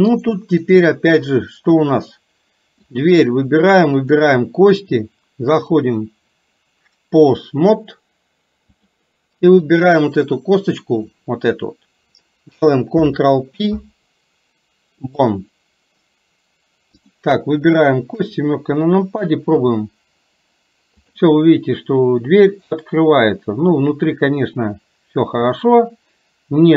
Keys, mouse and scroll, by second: 0.3 click, 3.0 click, 4.0 shift+click, 5.6-9.1 drag, 9.7 click, 13.1 ctrl+p, 17.0 click, 18.3 KP_7, 19.8 r, 21.5-26.7 middle drag.